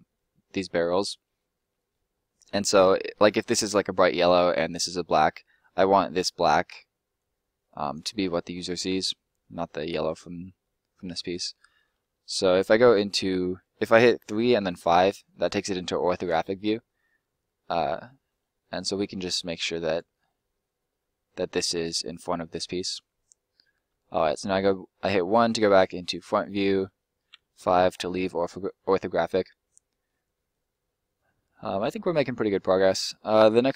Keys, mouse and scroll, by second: 5.3 middle click, 7.2 click, 8.0 middle click, 12.6 3, 14.5 5, 15.2-15.8 scroll up 2, 15.8 shift+middle click, 16.3-17.8 shift+scroll up 2, 17.8 shift+scroll up 1, 17.9 shift+middle click, 19.0 click, 24.2 1, 25.4 middle click, 27.3 5, 27.9-28.4 scroll down 1, 28.4 middle click, 29.2-29.6 scroll up 1, 29.6 middle click.